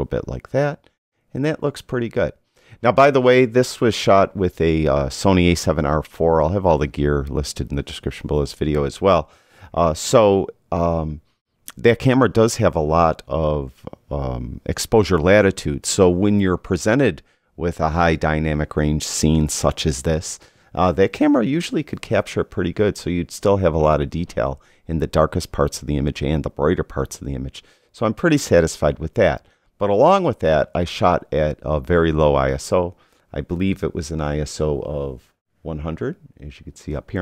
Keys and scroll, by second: 33.8 i.